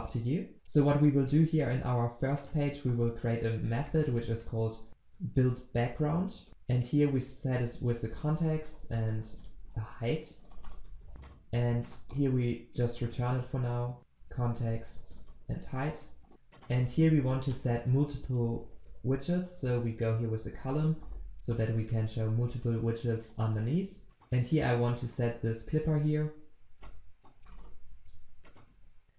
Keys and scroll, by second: 7.9 Return, 11.5 ctrl+c, 14.0 ctrl+v, 16.2 Return, 21.0 Return, 24.5 ctrl+w, 25.8 ctrl+x, 28.7 ctrl+v, 29.0 ctrl+s.